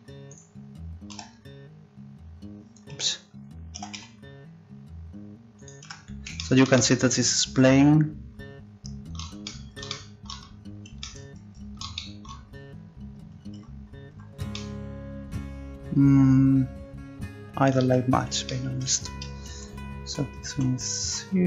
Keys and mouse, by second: 0.3-1.8 right drag, 1.1 s, 1.8-2.9 drag, 3.7 s, 5.9 Tab, 13.5 Tab, 14.1 Tab, 17.9 Tab, 19.5 ctrl+z, 20.0 ctrl+z, 20.5 ctrl+z, 21.0 ctrl+z.